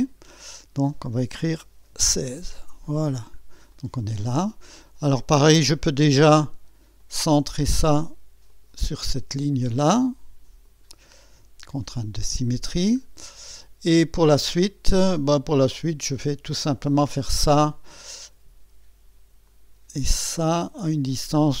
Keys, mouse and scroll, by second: 0.0 click, 1.5 1, 1.9 6, 2.3 Return, 3.0-3.4 scroll down 2, 3.7-4.7 right drag, 4.8 scroll up 2, 7.0 click, 8.5 click, 10.6 click, 11.9 click, 12.8 scroll down 1, 13.2 right click, 13.9 scroll up 1, 14.4-15.0 right drag, 16.9 click, 19.5 click, 21.0 click.